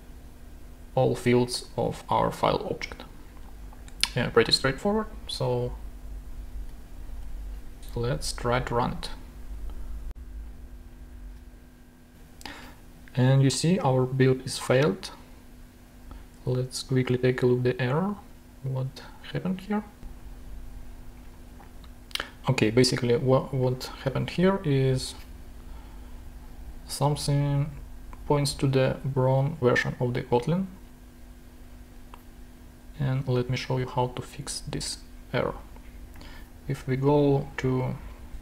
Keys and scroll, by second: 6.9 alt+super+l, 11.0 super+Tab.